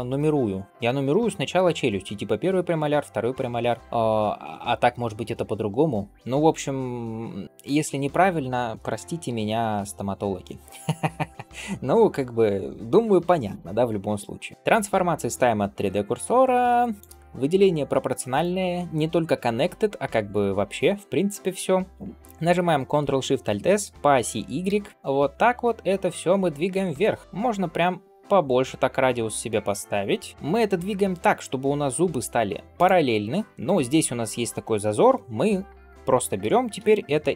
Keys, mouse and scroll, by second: 9.3 ctrl+s, 17.0-20.7 drag, 23.7 ctrl+alt+shift+s.